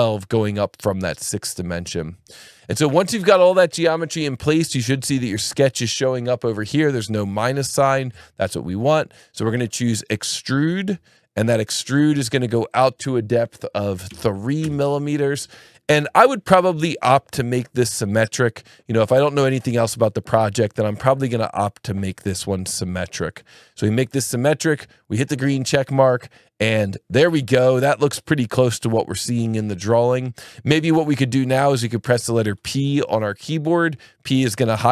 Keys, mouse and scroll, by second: 5.1 alt+1, 5.5 alt+click, 7.5 click, 8.2 alt+1, 9.9 click, 12.7 click, 14.1 KP_3, 14.6 KP_Enter, 17.8 click, 19.9 click, 21.0 click, 21.9 click, 22.7 click, 25.8 click, 33.4 p.